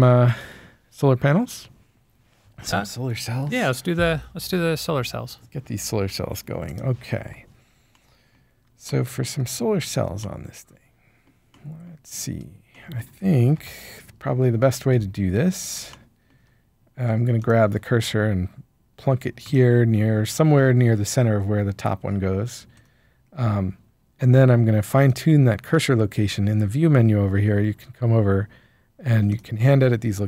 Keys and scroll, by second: 13.5 1.